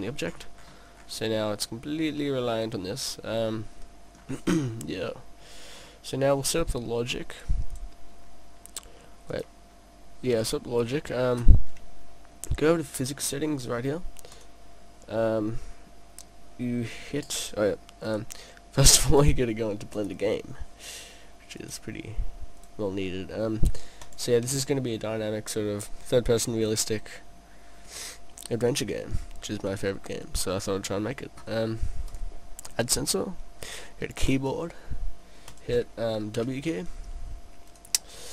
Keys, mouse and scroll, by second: 1.8 middle click, 4.6-4.9 scroll down 2, 4.7 middle click, 5.8-6.5 scroll down 2, 7.3 click, 7.7 click, 10.4-12.5 scroll down 4, 12.5 scroll down 2, 14.3 click, 16.0 click, 18.1 click, 19.2 click, 21.6 click, 22.6 click, 29.1 scroll up 1, 29.2 middle click, 32.1 click, 35.5 click, 37.7 click.